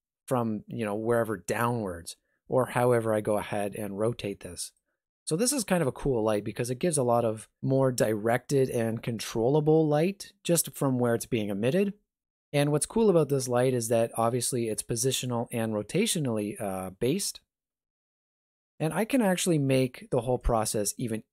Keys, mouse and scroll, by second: 2.8 r, 5.2 middle click, 6.2 shift+middle click, 6.9 middle click, 13.8 g, 15.6 r, 17.9 shift+middle click, 18.9-19.4 scroll down 2.